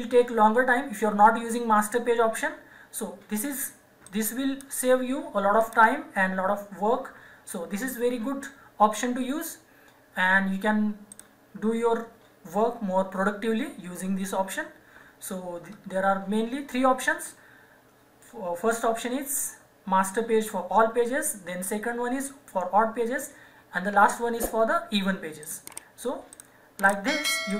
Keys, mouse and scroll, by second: 4.1 click, 11.1 click, 18.7 click, 25.4 click.